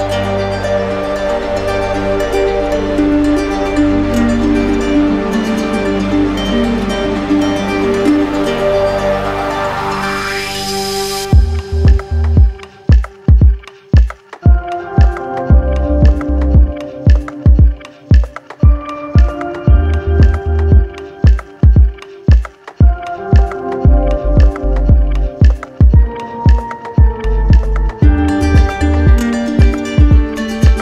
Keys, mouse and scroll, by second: 1.2 ctrl+click, 2.1 click, 4.6 click, 5.8 click, 7.5 ctrl+click, 9.4 z, 10.5 click, 11.4 right click, 12.4 click, 13.1 shift+click, 14.1 right click, 15.4 right click, 20.8 right click, 22.4 alt+click, 23.3 alt+click, 24.2 alt+click, 26.9 alt+click, 27.9 right click, 28.8 alt+click, 29.6 right click, 30.1 ctrl+click.